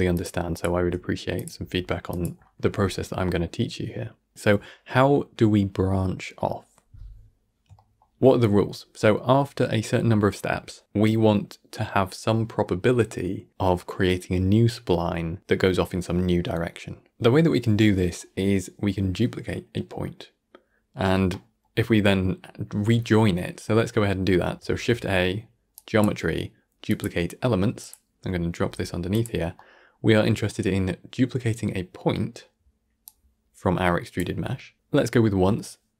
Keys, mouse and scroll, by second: 4.3-10.6 middle drag, 21.2-23.7 middle drag, 23.7 scroll up 1, 23.9-24.4 middle drag, 24.6 shift+a, 29.4 middle click, 29.9-30.3 scroll up 1, 30.3-32.9 middle drag, 32.9-35.9 drag.